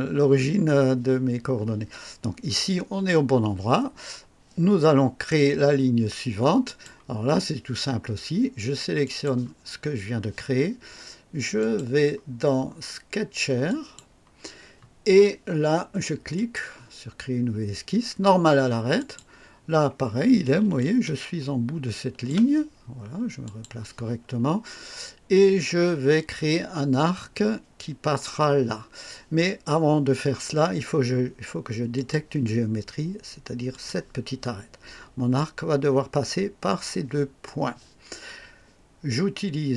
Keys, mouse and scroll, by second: 6.6 click, 9.0 click, 11.6 click, 13.7 click, 16.3 click, 19.0 click, 20.8-22.5 ctrl+alt+drag, 23.4 click, 31.9 click, 33.7 click.